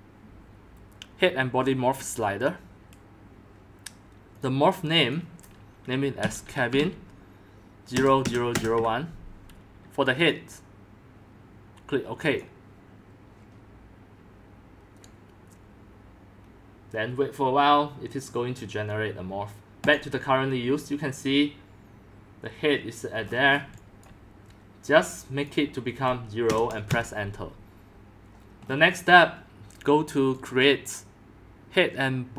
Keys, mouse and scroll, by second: 1.0-3.1 drag, 4.3 click, 5.1 click, 5.9-10.1 typing, 6.0 click, 10.2 click, 12.2 click, 12.7-17.4 drag, 19.8-22.3 drag, 23.2-23.7 scroll up 13, 23.7 x, 24.0-28.2 drag, 26.4 0, 26.9 Return, 28.6-30.2 middle drag, 28.6-30.4 scroll down 5, 30.4-32.3 drag.